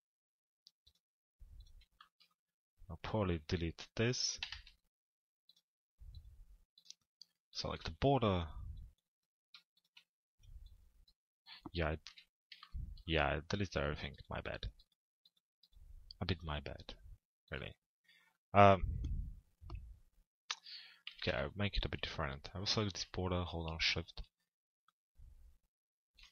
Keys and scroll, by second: 3.9 Delete, 11.7 p, 20.7 t, 21.3 z.